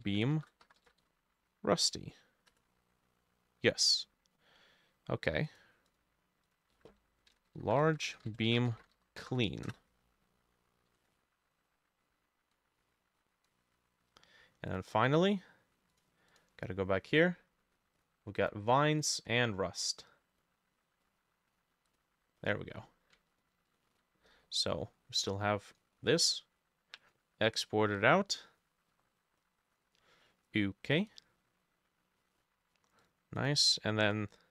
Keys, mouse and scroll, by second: 0.0-1.6 typing, 0.9-4.5 drag, 2.5 Return, 5.9-11.7 drag, 6.8 F2, 7.3-9.5 typing, 7.9 shift+middle click, 8.4 middle click, 9.7 Return, 16.4-18.3 drag, 18.4-20.4 drag, 23.2-27.8 ctrl+drag, 23.2-24.3 ctrl+middle drag, 33.4 double click, 33.7 double click, 34.1 double click.